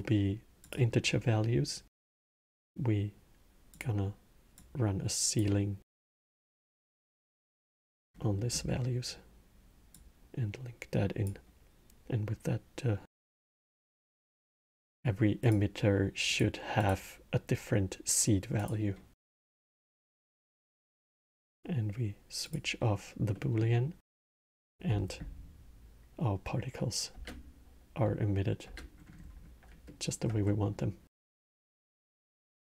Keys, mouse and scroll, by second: 0.7-1.9 middle drag, 1.9-6.4 drag, 7.9 middle click, 8.3 scroll, 9.7 drag, 13.4 click, 15.1 click, 16.0 drag, 16.5 click, 18.3 click, 19.2-22.2 middle drag, 22.2 click, 23.1-24.0 middle drag, 24.0 space, 26.9 space, 28.4 space, 28.7 scroll, 28.8 middle click, 29.6-31.5 alt+middle drag, 31.5 shift+Left.